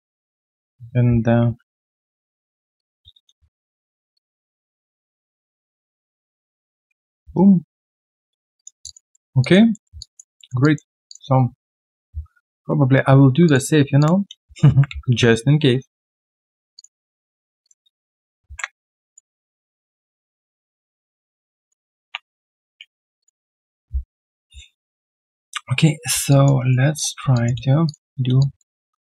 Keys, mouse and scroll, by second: 2.7 ctrl+click, 2.8-4.4 typing, 3.4 right click, 4.3 double click, 6.1-7.2 typing, 7.3 right click, 7.8-8.2 scroll down 1, 8.8 alt+click, 9.1 alt+middle click, 9.4 alt+click, 9.7 alt+middle click, 9.9 alt+click, 10.3 alt+middle click, 10.6 alt+click, 14.6 ctrl+c, 14.8 typing, 18.4 ctrl+v, 22.0 Delete, 22.7 Delete, 26.3 alt+click, 26.6 alt+right click, 27.3 alt+click, 27.8 shift+click, 28.4 alt+click.